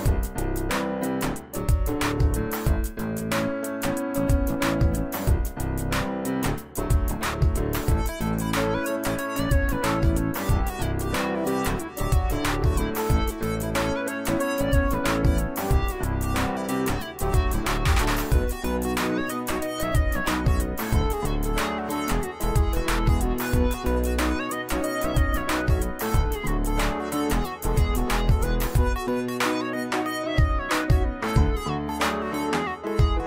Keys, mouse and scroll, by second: 0.8 Delete, 1.5 click, 4.2 ctrl+v, 5.8 click, 6.0-11.5 drag, 7.2-9.7 drag, 12.4 right click, 14.4 click, 16.8 shift+click, 21.7 shift+click, 23.9 shift+click, 24.5 right click, 26.0 click, 26.2 click, 29.8 click, 31.3 click.